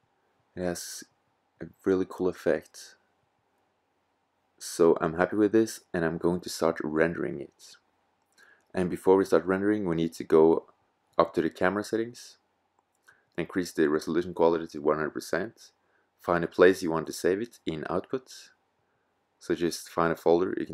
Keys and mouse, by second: 5.5-8.2 drag, 11.8-20.7 drag.